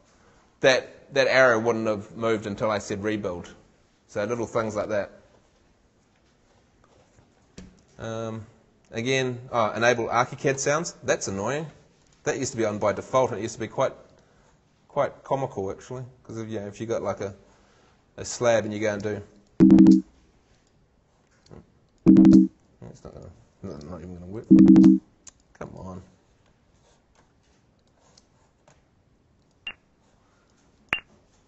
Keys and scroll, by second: 19.0 shift+space, 21.4 shift+space, 23.8 shift+space, 28.2 shift+space.